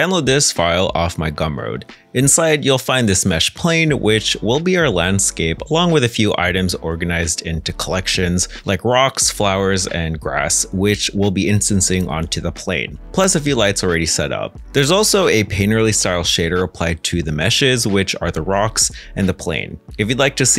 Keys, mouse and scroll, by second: 14.7-17.6 scroll up 1, 18.5 middle click.